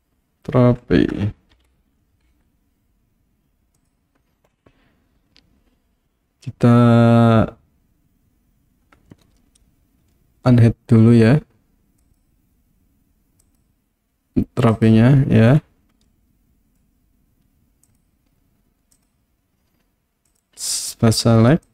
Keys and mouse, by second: 12.0 click, 13.4 click, 14.7 click, 16.1 middle click, 17.9 click, 19.0 click, 20.4 click.